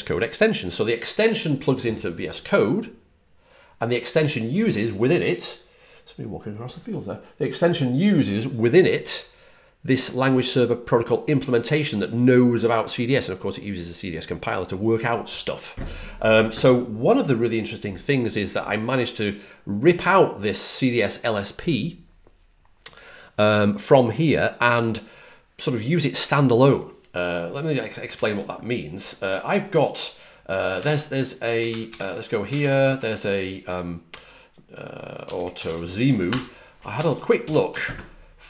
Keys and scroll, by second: 30.7 super+Tab, 31.8 super+n, 32.5 ctrl+alt+super+Left, 35.0-36.1 typing, 36.2 Return, 37.0 alt+super+Right, 37.3 alt+super+Right.